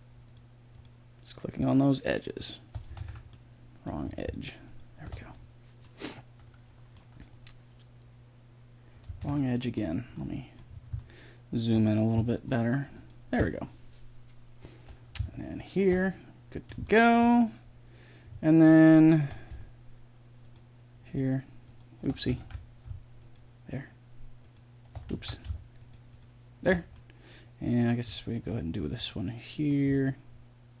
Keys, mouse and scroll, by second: 0.2-3.3 right drag, 3.0 ctrl+z, 3.3 middle click, 6.4-9.2 middle drag, 9.2 ctrl+z, 10.6 middle click, 12.8-14.8 right drag, 15.4 right click, 16.0-20.4 middle drag, 20.4-22.4 right drag, 22.4 ctrl+z, 25.1 ctrl+z, 28.2 middle click, 28.8-30.8 middle drag.